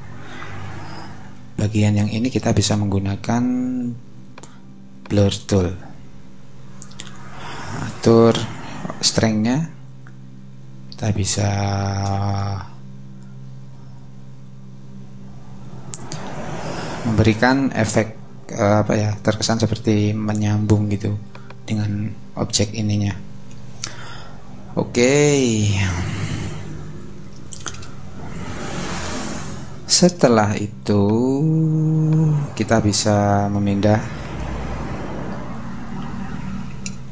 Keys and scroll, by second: 0.6 super+=, 1.9 super+space, 25.6 super+-, 27.2 super+-, 28.8 super+-, 36.9 alt+space.